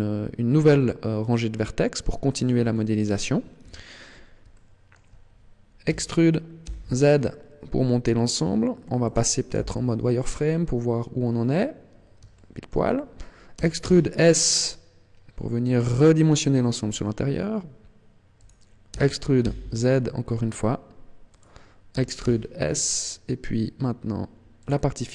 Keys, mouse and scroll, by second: 2.4 click, 2.6 middle click, 3.5 KP_1, 4.4 shift+middle click, 5.9 e, 9.1 click, 9.4 z, 10.3-10.7 scroll up 4, 11.1 scroll down 3, 12.3 shift+middle click, 13.5 e, 18.3 click, 18.8 e, 21.3 click, 21.9 e, 24.6 click.